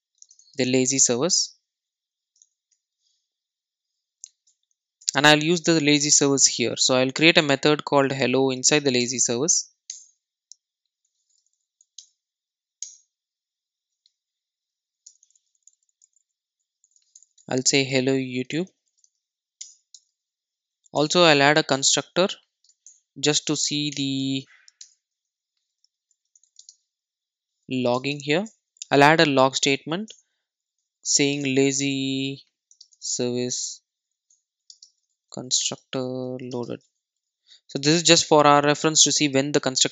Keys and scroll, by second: 8.9 Return, 11.9 alt+Return, 22.9 Return, 29.6 Tab, 38.5 super+s, 38.8 super+e.